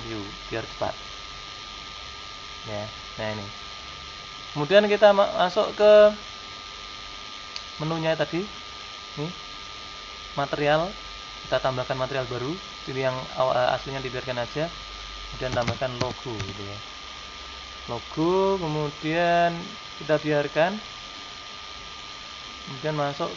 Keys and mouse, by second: 0.0 u, 7.3-9.2 drag, 9.4-11.3 drag, 11.5-14.2 drag, 14.4-16.1 drag.